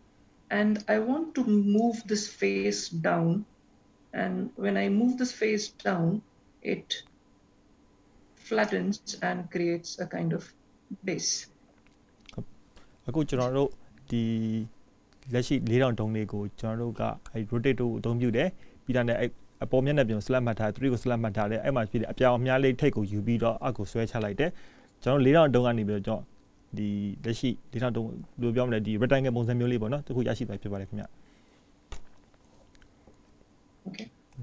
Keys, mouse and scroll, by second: 0.9 click, 1.9 click, 9.5-10.4 scroll up 2, 10.4-12.4 scroll up 2, 12.4 middle click, 16.6 middle click, 34.0 middle click.